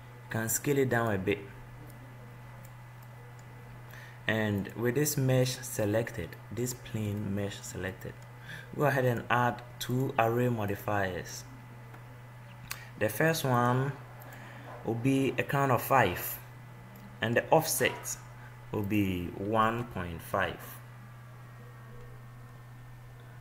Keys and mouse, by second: 0.7 s, 2.1-3.1 drag, 3.5 middle click, 5.3 click, 6.1 middle click, 7.6-9.3 middle drag, 9.3-13.0 drag, 13.5-16.5 drag, 17.3-19.0 middle drag, 19.1-21.0 drag, 21.0-22.3 middle drag.